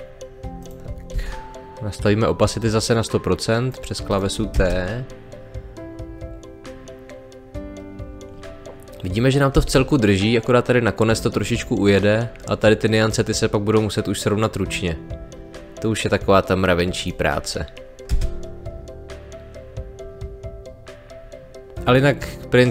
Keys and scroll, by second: 1.1 t, 4.5 space, 9.5 space, 18.1 space.